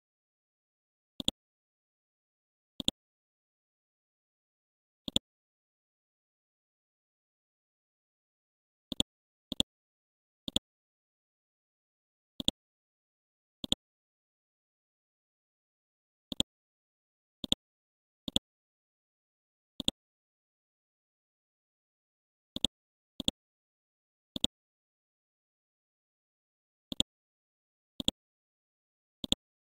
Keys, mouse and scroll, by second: 1.2 click, 2.8 shift+click, 5.1 click, 6.4-7.1 scroll up 1, 7.2-7.5 scroll down 1, 8.1-8.9 scroll up 1, 8.9-11.8 drag, 11.8-12.4 scroll up 1, 12.4 click, 13.6 shift+click, 15.3 scroll up 1, 15.9-16.3 scroll down 1, 16.3 click, 24.8 scroll up 1, 26.2-26.5 scroll up 1, 26.9 ctrl+click, 28.0-29.7 drag.